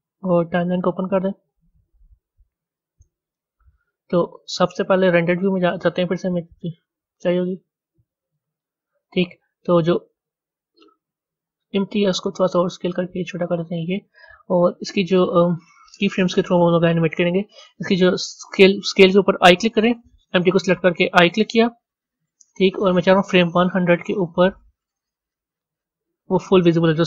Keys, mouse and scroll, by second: 0.5-8.1 drag, 8.1 z, 10.8 click, 12.1 s, 21.8 i, 25.0-25.6 drag, 26.5 s.